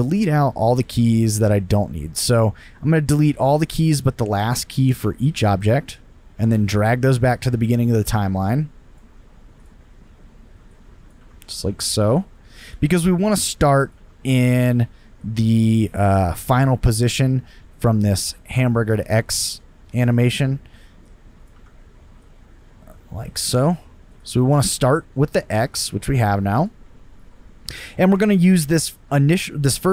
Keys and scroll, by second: 1.7 Delete, 3.7 Delete, 11.1 Delete, 13.9 Delete, 21.5 Delete.